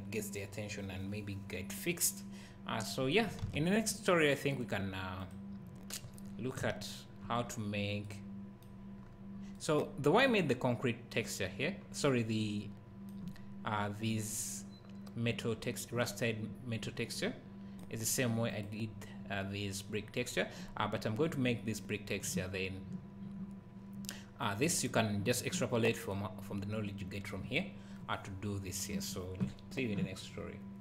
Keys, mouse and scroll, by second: 3.5 ctrl+s.